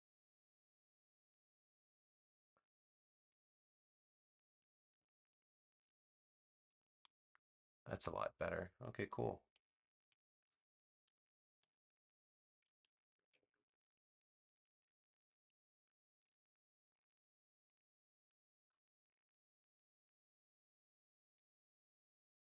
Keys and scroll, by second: 11.5 BackSpace, 13.2 super+j, 14.6 v.